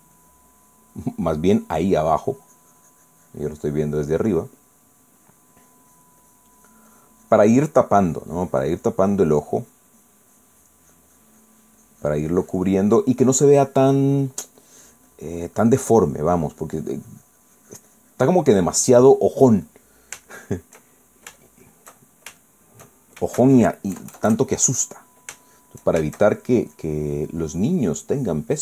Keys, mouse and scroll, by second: 0.9 click, 2.3-20.6 drag, 20.7-21.7 middle drag, 21.9-23.9 shift+middle drag, 24.9 KP_Add, 26.4 shift+middle click, 27.1-28.3 shift+middle drag.